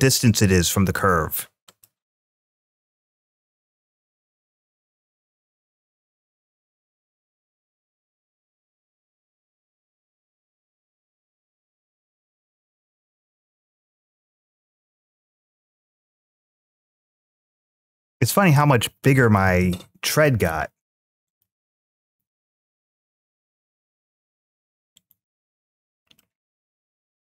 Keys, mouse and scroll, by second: 1.5 click, 2.5-3.6 drag, 4.3-5.9 scroll down 1, 6.0 click, 6.3 click, 6.8 click, 7.2 click, 7.6 click, 7.8 click, 8.6-10.9 drag, 12.3 scroll down 1, 14.8-16.5 drag, 17.2-19.0 drag, 19.4 ctrl+z, 21.0 click, 21.9 s, 24.8 right click, 26.0-26.6 middle drag.